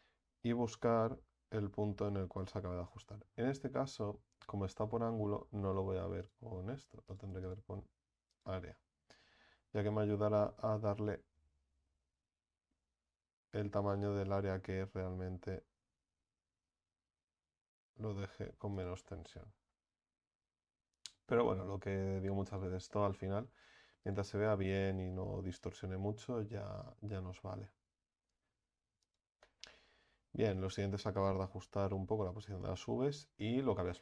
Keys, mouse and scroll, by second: 11.8 g, 20.0 Tab, 20.7 Tab, 24.8 a, 25.0 a, 29.1 n, 31.2-34.0 right drag.